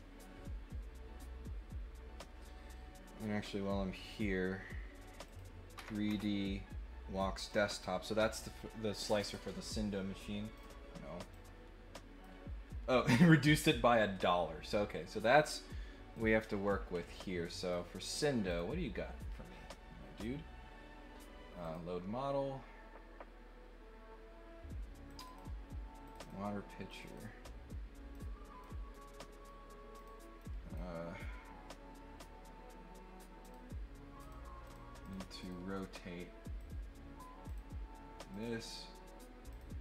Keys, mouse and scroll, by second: 5.2 click, 7.3 click, 10.5 click, 11.3 click, 16.1-17.7 drag, 18.5 click, 21.6 click, 25.0 click, 25.2 click, 26.0 click, 26.8 click, 27.0 click, 28.0 click, 28.9 right click, 29.9 click, 30.4 click, 33.4 click, 34.2 click, 34.6 click, 35.0 click, 35.4 click, 36.6 click, 37.4 click, 38.3 click, 39.5 click.